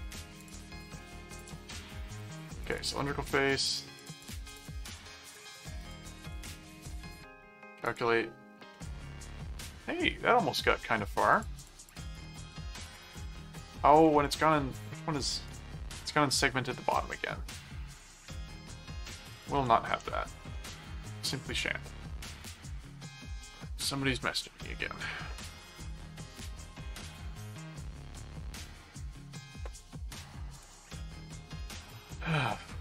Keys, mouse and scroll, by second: 0.4 click, 1.4 click, 2.6 click, 4.0-6.7 drag, 7.9 click, 8.7-10.1 middle drag, 10.5 middle click, 11.3-13.5 drag, 14.2 click, 15.4 right click, 15.9 click, 17.0 middle click, 18.5 click, 19.4 click, 20.0 Return, 21.2 middle click, 22.4 click, 30.9 middle click, 31.6 click, 31.9 middle click.